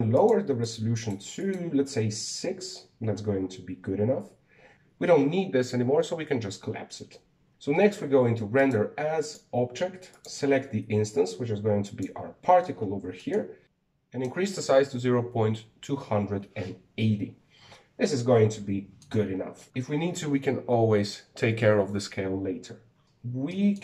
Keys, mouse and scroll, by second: 1.0-4.6 drag, 4.6 scroll down 2, 4.7 click, 5.3 click, 7.5-11.0 drag, 13.2 scroll down 3, 13.5 scroll up 1, 18.8 scroll down 2, 19.0-23.0 middle drag, 23.0-23.8 scroll up 6.